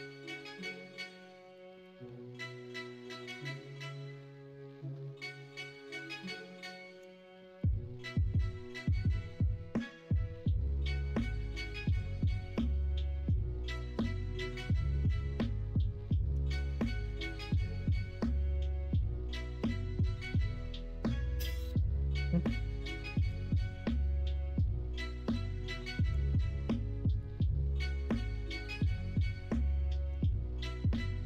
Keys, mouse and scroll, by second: 2.1 middle click, 3.5 middle click, 7.1 shift+d, 9.1 alt+s, 12.2 ctrl+z, 16.4 shift+d, 17.5 alt+s, 21.9 shift+middle click, 23.2 x, 26.0 ., 30.5-31.2 middle drag.